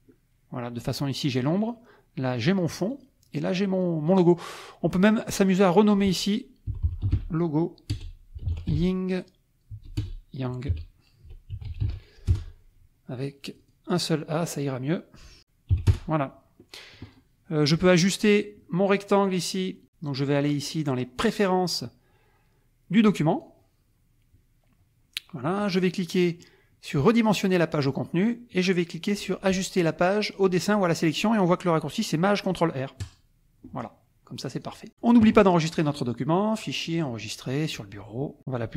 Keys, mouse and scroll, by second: 1.2 click, 1.6 click, 2.5 click, 2.9 click, 3.7 click, 4.1 click, 5.1 click, 5.7 click, 6.5-12.3 typing, 13.4 click, 14.1 click, 15.4 Right, 15.7 Delete, 15.9 Return, 17.0 click, 17.8 click, 18.3 click, 19.2 click, 23.3 click, 25.5 click, 27.3 click, 33.0 click, 34.5 click, 35.7 click, 37.0 click.